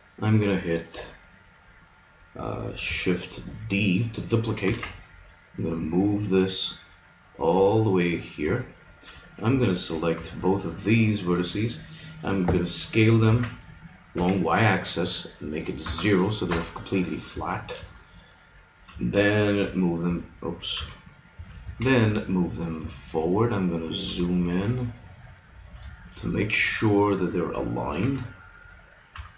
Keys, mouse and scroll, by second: 0.7 right click, 4.7 shift+d, 8.6 middle click, 9.5 a, 10.2 b, 13.3 s, 17.4 middle click, 18.1 middle click, 19.7-20.8 middle drag, 20.7 KP_3, 21.6 g, 25.1 middle click, 28.0-29.3 middle drag, 29.1 KP_3.